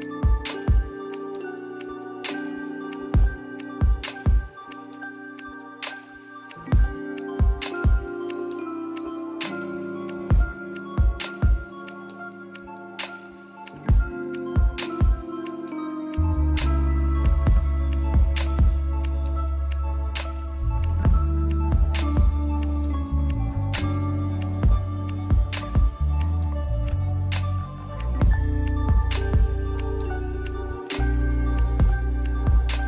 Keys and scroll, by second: 0.0 ctrl+z, 1.8-2.2 scroll up 1, 2.8 ctrl+z, 7.6 ctrl+z, 8.4 ctrl+z, 10.1 ctrl+z, 10.6 scroll down 1, 10.8-11.1 scroll up 1, 12.1 ctrl+z, 12.7 scroll down 1, 13.2 scroll up 1, 13.3 ctrl+z, 14.7 ctrl+z, 15.2 ctrl+z, 16.1 ctrl+z, 16.3 scroll down 1, 16.3-16.9 scroll up 1, 17.0 ctrl+z, 17.6 scroll down 1, 17.9 scroll up 1, 18.1 ctrl+z, 20.1 scroll down 1, 20.4 scroll up 1, 22.6 scroll down 1, 23.8 [, 24.4 ctrl+z, 25.4 ctrl+z, 26.0 ctrl+z, 27.8 scroll down 1, 27.9 scroll up 1, 29.4 scroll down 1, 29.5 scroll up 1, 30.0 ctrl+z, 30.4 ctrl+z, 31.0 ctrl+z, 32.5 ctrl+z.